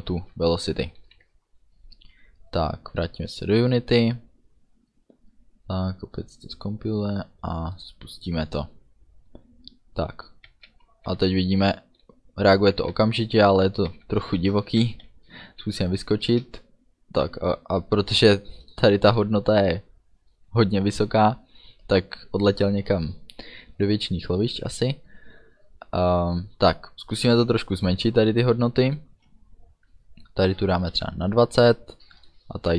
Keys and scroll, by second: 1.0 ctrl+s, 10.3-16.4 typing, 30.8 2, 31.0 0.